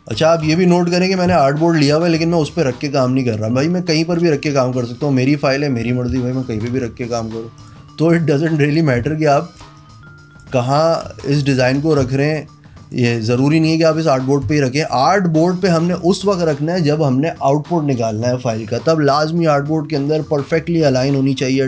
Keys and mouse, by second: 0.0 click, 0.6 ctrl+g, 0.9 click, 1.3 click, 1.5 space, 1.6 click, 1.8 click, 2.0 click, 3.3 click, 4.5 click, 5.5 click, 6.8 ctrl+shift+g, 7.8 click, 8.3 click, 9.1 space, 9.9 click, 11.2 ctrl+g, 11.6 click, 12.2 space, 12.4 click, 13.9 click, 14.6 space, 14.7 click.